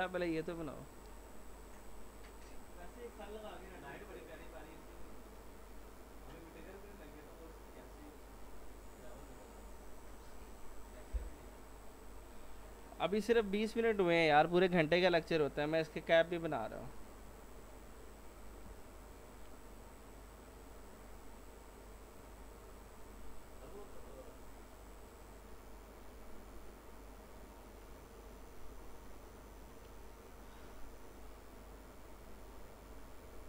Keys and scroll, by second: 18.7 F4, 33.3 s.